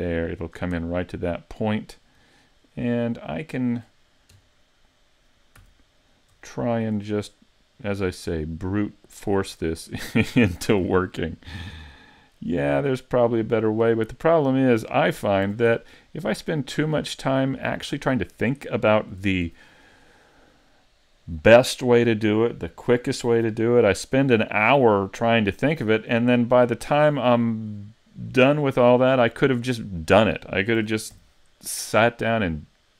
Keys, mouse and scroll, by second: 0.9 middle click, 2.4 shift+middle click, 3.0 middle click, 4.4 KP_1, 5.6 z, 6.1 scroll up 3, 6.6 shift+middle click, 7.9 click, 10.5 s, 13.5 click, 15.5 s, 17.1 click, 19.2 s, 22.0 click, 25.3 click, 29.4 middle click, 30.8 s.